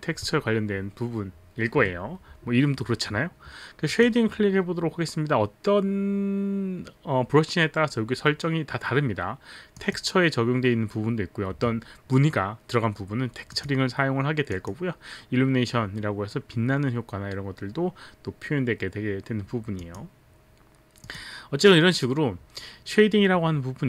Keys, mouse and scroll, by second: 3.8 click, 9.8 click, 13.5 click, 14.6 click, 19.8 click, 21.0 click.